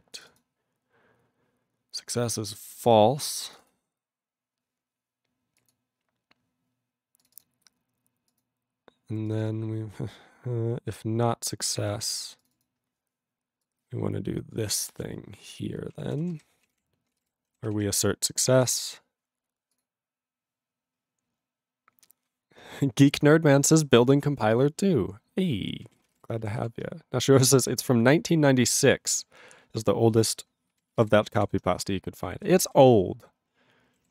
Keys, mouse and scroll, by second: 0.1 click, 0.2 click, 0.3 click, 0.4 click, 2.8 click, 2.9 click, 3.4 click, 3.6 click, 3.7 click, 4.2 click, 4.3 click, 5.6 click, 5.7 click, 7.2 click, 7.3 click, 7.3 click, 7.4 double click, 8.3 click, 8.4 click, 9.3 click, 9.3 click, 9.4 click, 9.5 double click, 9.8 scroll down 5, 11.0 click, 11.9 click, 12.1 click, 12.1 click, 12.4 click, 12.5 click, 12.5 click, 12.6 double click, 13.6 click, 14.7 click, 15.0 alt+w, 15.5 click, 16.0 ctrl+a, 16.1 ctrl+o, 16.2 ctrl+o, 16.3 ctrl+y, 16.6 ctrl+a, 16.7 Tab, 17.1 ctrl+space, 17.1 ctrl+e, 17.2 ctrl+g, 17.8 ctrl+s, 18.3-18.7 scroll up 4, 18.7 ctrl+s, 19.3 ctrl+s, 19.7 click, 19.8 click, 25.8 ctrl+a, 26.0 ctrl+space, 26.1 ctrl+e, 26.1 ctrl+g, 26.6 ctrl+s, 30.7 ctrl+a, 30.8 ctrl+space, 30.9 ctrl+e, 31.0 ctrl+g, 31.4 ctrl+s, 32.7 ctrl+s.